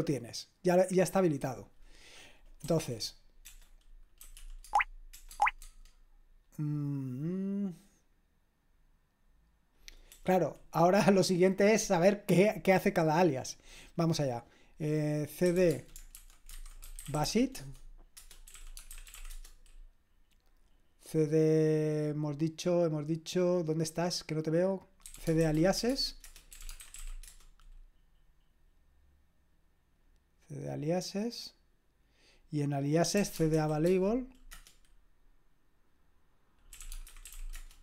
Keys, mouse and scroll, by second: 2.6 typing, 4.0-5.1 typing, 5.3 Tab, 5.6 Tab, 10.1 BackSpace, 15.2-19.6 typing, 24.8-27.8 typing, 32.9-34.5 typing, 36.5-37.8 typing.